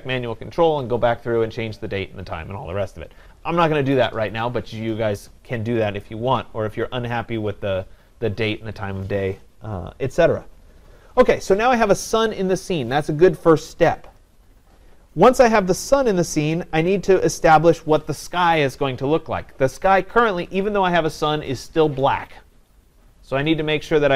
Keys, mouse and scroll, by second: 6.0-11.1 drag.